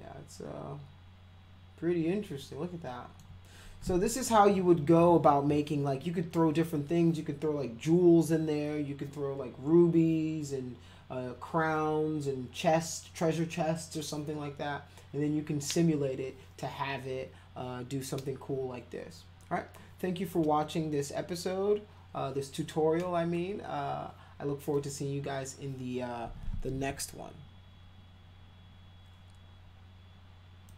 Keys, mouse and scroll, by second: 30.7 click.